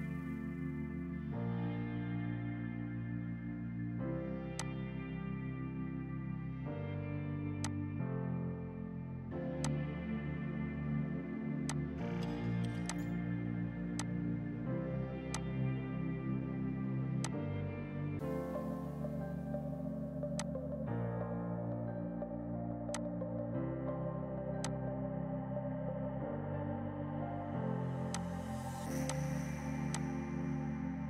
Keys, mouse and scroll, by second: 1.5 ctrl+Num_Lock, 2.6 ctrl+z, 4.3 Escape, 4.6 click, 7.6 click, 8.4 ctrl+z, 9.6 shift+click, 10.4 Delete, 11.6 F2, 11.7 click, 14.1 shift+click, 14.4 c, 15.4 click, 17.2 F2, 17.3 click, 17.6 right click, 18.6 Escape, 19.6 F6, 20.4 click, 22.4 space, 23.0 shift+click, 26.0 ctrl+g, 28.2 shift+click, 28.5 e, 29.1 shift+click.